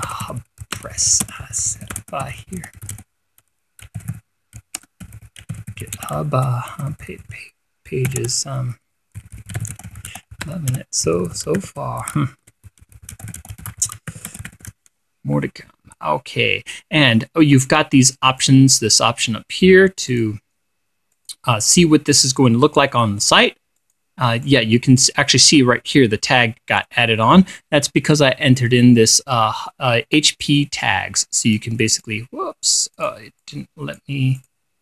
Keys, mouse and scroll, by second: 0.0-15.6 typing, 18.9 click, 20.6 click, 21.6 click, 24.3 click, 25.0 click, 29.6-30.9 drag, 30.9 click, 31.3 click, 32.5-33.8 drag, 33.9 click.